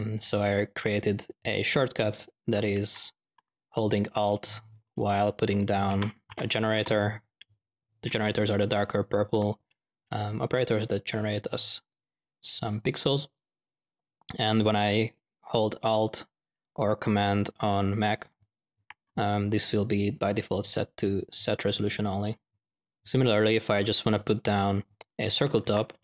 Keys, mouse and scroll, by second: 0.5 click, 2.4 ctrl+click, 2.7 ctrl+x, 3.2 click, 3.7 click, 5.6-7.2 typing, 11.8 click, 18.2 alt+click, 19.3 click, 22.5-23.2 typing, 24.9 click, 25.6-26.0 typing.